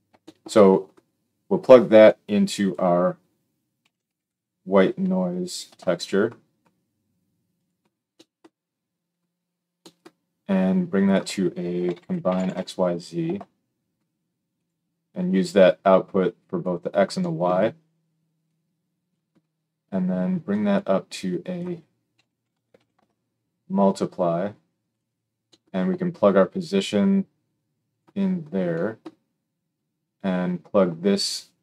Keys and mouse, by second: 7.6-10.6 middle drag, 10.6-14.6 drag, 14.6-15.4 middle drag, 15.4-20.7 drag, 20.7 middle click, 21.1-24.9 drag, 24.9-26.6 middle drag, 26.6-31.6 drag.